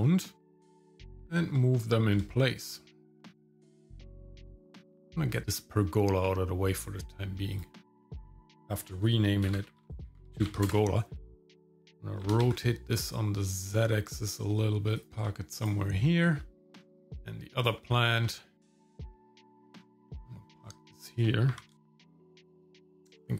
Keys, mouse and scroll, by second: 0.0-0.4 scroll up 2, 0.4 shift+middle click, 0.6 g, 1.0 shift+middle click, 1.2 scroll down 1, 1.2 shift+middle click, 2.3-4.6 shift+middle drag, 7.5 click, 8.0-10.7 drag, 11.4 click, 11.6 shift+middle click, 11.7 click, 11.8 click, 12.2 r, 15.1 g, 16.4 shift+middle click, 17.1 click, 18.3 shift+middle click, 18.7 g, 19.4 g, 20.0 scroll down 1, 20.1 shift+middle click, 20.7 middle click, 21.5 g, 22.1 shift+middle click, 22.4 KP_0.